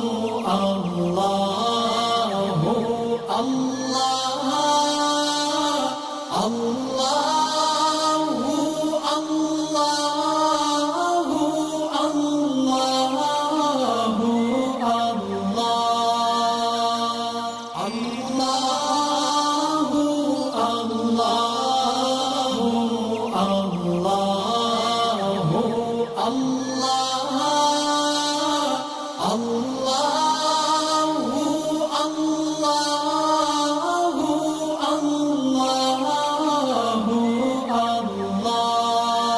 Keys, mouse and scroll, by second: 2.9 alt+scroll up 1, 4.1 click, 6.0-7.5 shift+drag, 11.6 alt+scroll down 2, 12.3-14.1 drag, 14.2 alt+scroll up 1, 14.8 click, 15.4 alt+scroll up 1, 15.8-16.9 click, 17.0 alt+scroll down 1, 18.4 click, 21.4-21.9 alt+scroll up 1, 21.9-22.4 alt+click, 24.6 alt+scroll up 1, 25.0 alt+click, 27.1 space, 27.2-27.6 scroll down 2, 27.8 space, 27.9 click, 29.8 alt+scroll up 1, 30.4-31.0 alt+shift+click, 34.6 space, 34.6-36.4 drag.